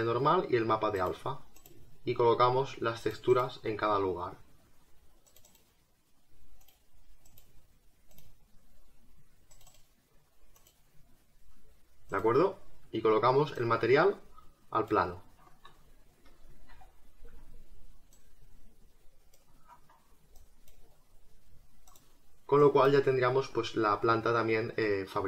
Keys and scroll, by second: 16.7 r.